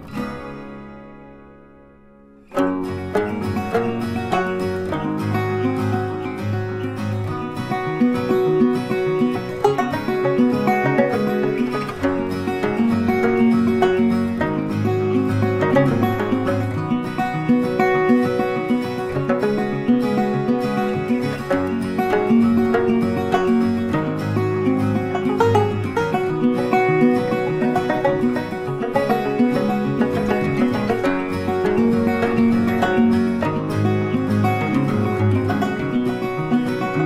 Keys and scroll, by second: 2.3 ctrl+c, 2.4 ctrl+f, 4.8 ctrl+8, 30.4 ctrl+c, 30.5 ctrl+f.